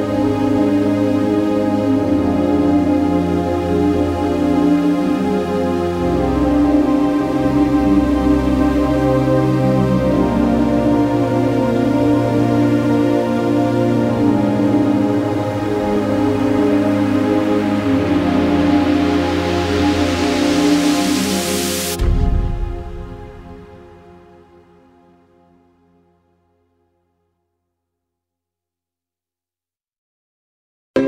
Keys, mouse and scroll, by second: 1.1 Escape, 1.5 click, 3.8 scroll up 1, 4.8-5.3 scroll down 1, 5.3 d, 5.9 click, 6.4 scroll up 1, 8.1-9.4 typing, 10.3 Escape, 10.8 click, 11.5 Escape, 12.5 click, 15.8 scroll up 1, 16.7 Escape, 17.2 scroll down 1, 19.8 l, 20.3 x, 20.8 click, 22.3 Escape, 22.7 click, 22.9-24.8 typing, 23.4 click, 25.4 Escape, 26.2 l, 26.7 x, 27.1 click, 28.4 Escape, 28.9 click, 29.4 d, 30.3 click, 30.9-31.0 scroll up 1.